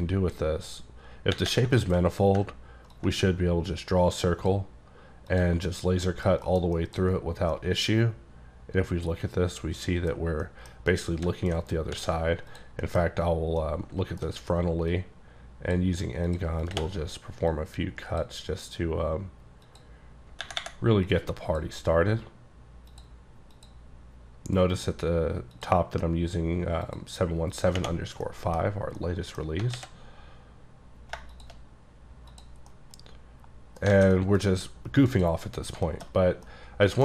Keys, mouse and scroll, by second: 1.8 shift+middle click, 2.0-2.4 scroll up 5, 3.0 ctrl+click, 3.3 click, 5.8 scroll down 2, 6.1 middle click, 6.5 KP_Decimal, 6.8 middle click, 7.0-7.6 scroll up 2, 7.6-9.4 middle drag, 9.4 middle click, 10.2-10.5 scroll down 4, 10.5 middle click, 10.9 middle click, 11.6 scroll up 2, 11.9 d, 12.5 click, 12.9 middle click, 13.0-13.4 scroll up 2, 13.4 scroll, 13.5 scroll up 1, 13.6 middle click, 14.2 alt+scroll up 1, 15.0 click, 16.3 click, 16.7 click, 17.5 click, 19.7 click, 21.1 click, 22.9 click, 23.6 click, 25.6 click, 26.9 click, 28.3 middle click, 28.6-29.6 scroll down 9, 29.1 middle click, 29.8 alt+x, 31.4 shift+click, 32.7 middle click, 33.8 scroll down 2, 34.0 alt+a, 35.2 click, 35.9 middle click, 36.2-36.5 scroll down 2, 36.5 middle click.